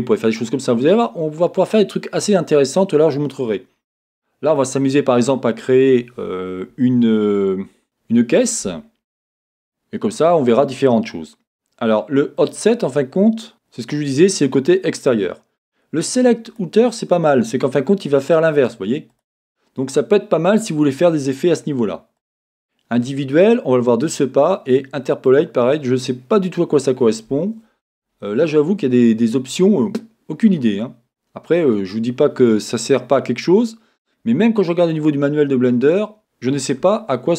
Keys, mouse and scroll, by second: 16.5 click, 18.5 click, 19.1 click, 22.2 click, 32.0-32.5 scroll, 32.5-37.3 middle drag.